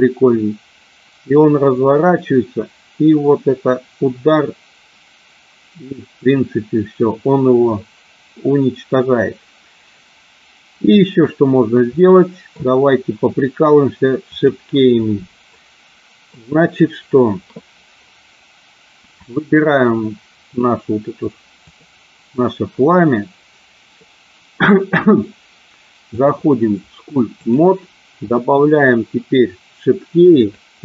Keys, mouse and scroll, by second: 12.0 middle click, 14.3 click, 15.6 middle click, 19.3 click, 21.6 click, 26.1-27.8 drag, 30.4-30.8 drag.